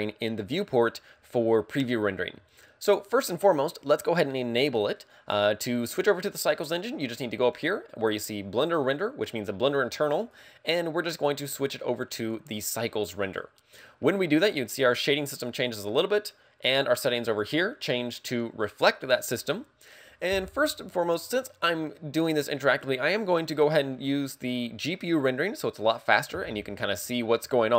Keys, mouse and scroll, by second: 10.2 click.